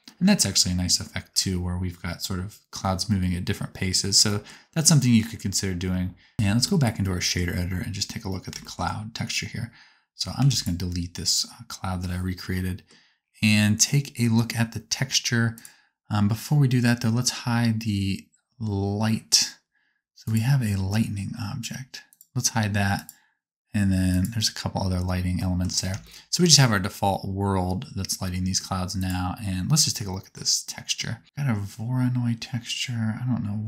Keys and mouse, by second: 0.3 space, 1.4 space, 4.2 shift+middle click, 5.4 space, 6.0 space, 8.9-12.0 middle drag, 10.6 x, 12.0-20.3 right drag, 15.5 click, 20.2-22.1 drag, 24.1 click, 24.1 middle click, 24.1 right click.